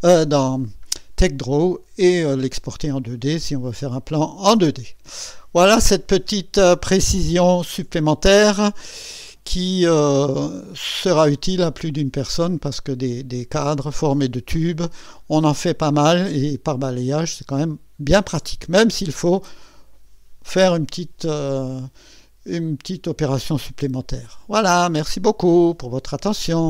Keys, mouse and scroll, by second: 3.1 scroll up 2, 4.0 scroll down 2, 9.4 scroll up 2, 10.2-11.5 right drag, 25.2 right click, 26.6 click.